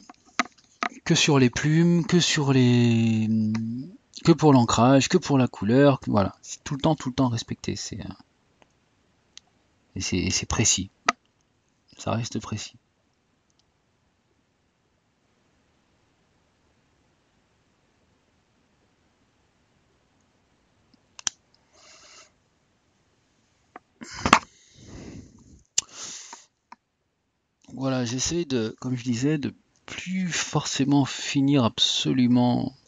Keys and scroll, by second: 2.1 typing.